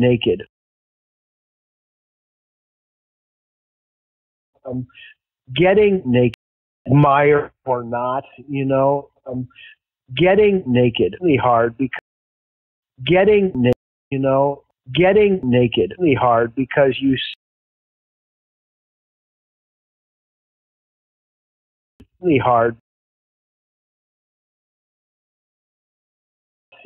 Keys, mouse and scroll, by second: 0.5 space, 0.7 click, 1.8-3.7 drag, 4.3 click, 4.4 space, 6.2 space, 6.7 click, 6.8 space, 10.7-11.8 drag, 11.9 space, 12.5 ctrl+shift+Delete, 12.7 space, 13.6 space, 14.0 click, 14.0 space, 17.2 space, 17.7 click, 18.4 click, 20.0 click, 21.8 click, 21.8 space, 22.7 space, 23.5 click, 24.6-25.8 drag, 26.6 click, 26.6 space.